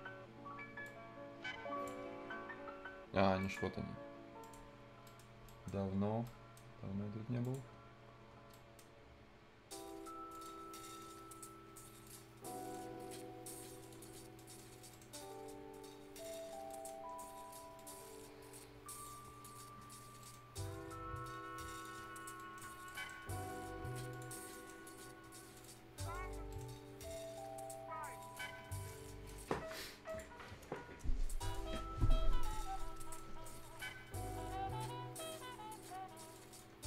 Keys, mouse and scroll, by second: 4.7 ctrl+scroll up 1, 5.0 ctrl+right click, 7.4 ctrl+click, 7.7 ctrl+scroll up 1, 8.5 ctrl+right click, 8.9-10.3 ctrl+scroll up 1, 10.3 ctrl+click, 10.8 ctrl+right click, 11.1 ctrl+scroll up 1, 12.0 ctrl+click, 12.2 ctrl+scroll down 1, 12.4 ctrl+right click, 13.8 ctrl+click, 14.1 ctrl+scroll up 1, 14.3 ctrl+right click, 14.6 scroll up 2, 14.9 ctrl+right click, 16.2 ctrl+click, 16.5 ctrl+scroll down 1, 16.6 ctrl+right click, 17.7 ctrl+click, 18.0-18.8 ctrl+scroll down 1, 18.9 ctrl+click, 19.2 ctrl+scroll up 1, 19.4 ctrl+right click, 19.8 ctrl+scroll down 1, 20.0-21.2 ctrl+scroll up 2, 20.2 ctrl+right click, 21.7 ctrl+click, 22.0 scroll down 1, 22.3 ctrl+right click, 22.6 ctrl+scroll down 1, 22.8 ctrl+right click, 23.1 ctrl+scroll up 1, 24.1 ctrl+click, 24.3 ctrl+scroll down 1, 24.5 ctrl+right click, 24.7 ctrl+scroll up 1, 25.5 ctrl+click, 25.8 ctrl+scroll down 1, 26.0 ctrl+right click, 26.2-26.8 ctrl+scroll up 2, 26.5 ctrl+right click, 28.2 ctrl+click, 28.5-28.8 ctrl+scroll down 1, 28.8 ctrl+right click, 29.3 ctrl+scroll down 1, 29.5-29.8 ctrl+scroll up 1, 30.0 ctrl+click, 31.7 ctrl+scroll down 1, 32.0 ctrl+scroll up 1, 32.3 ctrl+right click, 32.6-32.9 ctrl+scroll up 1, 32.9 ctrl+right click, 33.2-33.7 ctrl+scroll up 1, 33.7 ctrl+scroll down 1, 35.2 ctrl+click, 35.4 ctrl+scroll down 1, 35.6-36.3 ctrl+scroll up 1, 36.3 ctrl+click, 36.7 ctrl+scroll down 1.